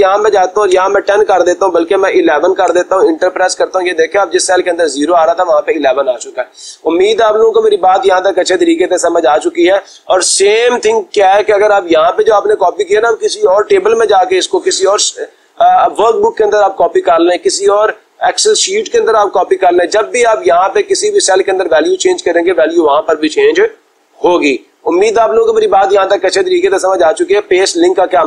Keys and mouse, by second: 0.3-1.9 typing, 2.7 Return, 4.9-6.0 drag.